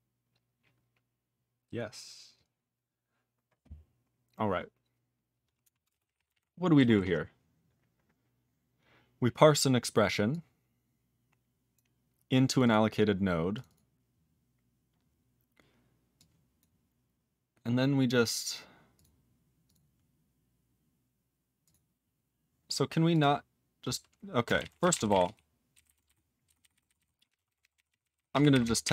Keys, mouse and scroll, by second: 5.8 ctrl+space, 5.9 ctrl+p, 5.9 ctrl+a, 6.0 ctrl+p, 6.1 ctrl+p, 6.2 ctrl+g, 6.3 ctrl+e, 6.9 ctrl+s, 7.5 ctrl+s, 8.2 scroll down 4, 9.2 scroll down 3, 11.7 click, 12.5 click, 12.6 click, 12.6 double click, 12.7 double click, 13.5 click, 13.6 click, 13.6 double click, 13.7 click, 13.7 double click, 16.1 click, 16.5 click, 18.9 click, 19.0 click, 19.6 click, 19.7 click, 21.6 click, 21.7 click, 23.1 click, 23.2 click, 24.5 ctrl+a, 24.6 ctrl+p, 24.8 ctrl+space, 24.9 ctrl+n, 25.0 ctrl+g, 25.1 ctrl+e, 25.2 ctrl+p, 25.7 ctrl+n, 25.8 ctrl+b, 26.0 ctrl+b, 26.4 ctrl+b, 26.6 ctrl+b, 26.7 ctrl+b, 26.8 ctrl+b, 26.9 ctrl+b, 27.3 ctrl+p, 27.3 ctrl+a, 27.5 ctrl+k, 27.6 ctrl+k, 27.8 ctrl+n, 27.9 ctrl+n, 28.0 ctrl+n, 28.1 ctrl+n, 28.3 ctrl+p, 28.5 ctrl+k, 28.6 ctrl+k, 28.8 ctrl+n.